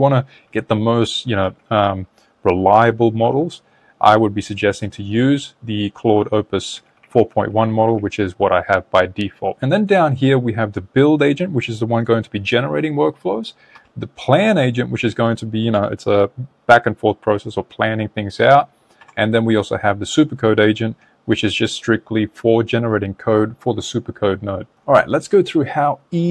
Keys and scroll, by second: 4.1 Down, 4.8 Up, 6.2 Down, 6.8 Up.